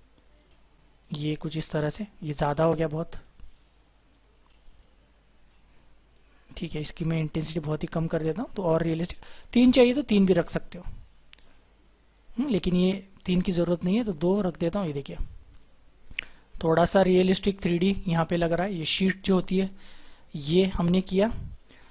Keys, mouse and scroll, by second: 15.5 double click, 16.0-16.4 scroll down 1, 16.4-18.6 scroll up 1, 21.2-21.9 scroll down 1.